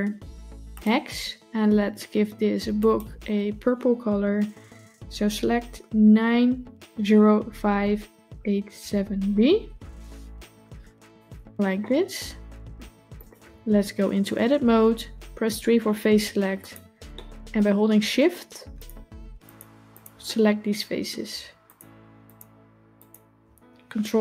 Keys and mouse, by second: 11.0 click, 11.6-12.6 middle drag, 13.0 click, 14.3 Tab, 15.5 3, 16.6 click, 17.0-17.4 middle drag, 18.6 shift+click, 19.3 shift+click, 20.1-21.0 middle drag, 21.5 shift+click, 22.8 shift+click.